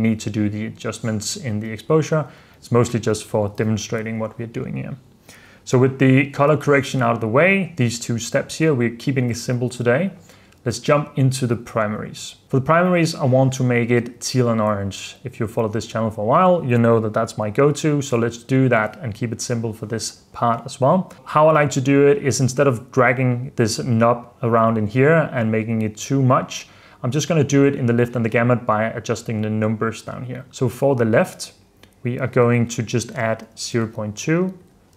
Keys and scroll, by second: 1.8 super+f, 2.4 super+d, 3.2 super+f, 3.8 super+s, 33.1-34.0 typing.